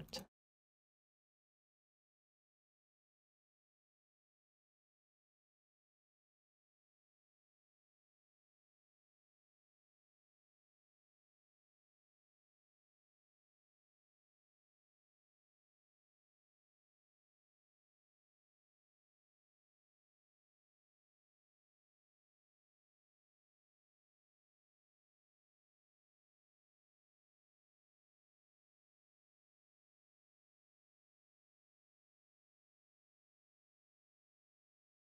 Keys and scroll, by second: 3.6 ctrl+s, 6.8 alt+shift+d, 7.1 ctrl+s, 9.2 6, 10.3 5, 11.4 ctrl+s, 24.8 shift+h.